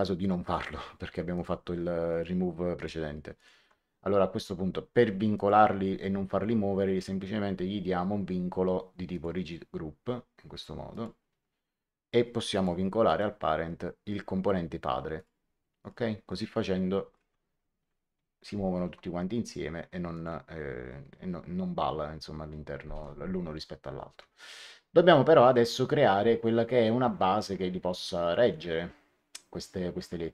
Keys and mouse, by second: 0.3 click, 1.3 ctrl+click, 5.3 click, 9.0 click, 10.8 click, 12.5 click, 13.0 right click, 15.1 click, 18.7 ctrl+z, 20.0 click.